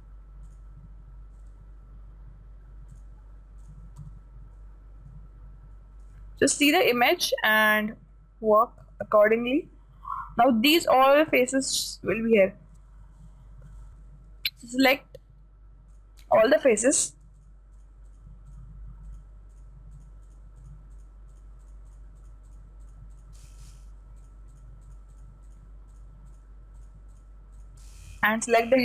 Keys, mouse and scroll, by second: 0.9 right click, 3.4-6.1 drag, 4.4 a, 4.9-9.2 middle drag, 9.4-11.2 middle drag, 11.3-13.9 middle drag, 16.4-28.8 right drag.